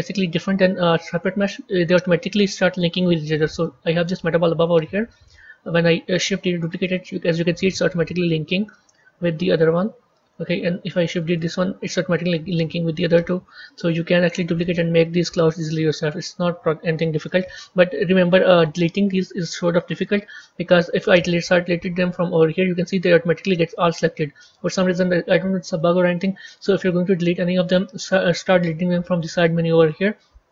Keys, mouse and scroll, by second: 1.2-1.7 scroll up 2, 1.7-2.8 scroll down 2, 3.6-6.3 middle drag, 6.3 shift+d, 8.2 middle click, 9.1-9.6 scroll up 3, 9.6-11.1 middle drag, 11.1 shift+d, 13.4 shift+d, 15.4-16.7 middle drag, 16.7-17.3 scroll down 2, 17.3-22.1 middle drag, 22.1 click, 23.7-26.8 middle drag, 26.8 click, 28.6 shift+click.